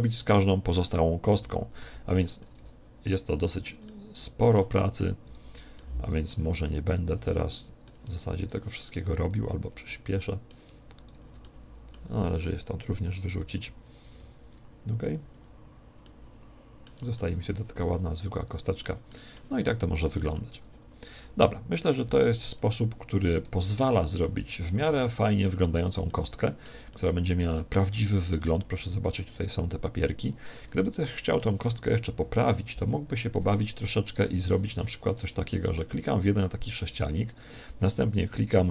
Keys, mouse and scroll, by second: 1.4 KP_Divide, 2.6 Tab, 3.8-5.6 middle drag, 5.2-9.9 right drag, 5.8-10.5 middle drag, 11.0 right click, 11.4-13.0 middle drag, 13.0 ctrl+l, 13.1-14.1 middle drag, 14.1 x, 16.0-22.0 middle drag, 20.5 Tab, 22.0 KP_Divide, 23.4 Tab, 24.0-32.4 middle drag, 24.6 a, 24.9 Tab, 32.0 KP_1, 33.4-35.0 middle drag, 34.5 Tab, 34.9 Tab, 35.2 right click, 36.6 Tab, 37.4 right click.